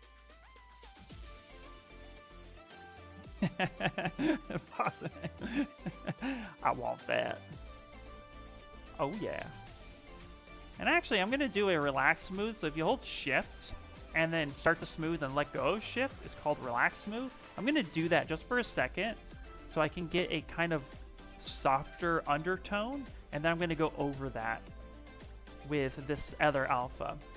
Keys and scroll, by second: 7.2 s.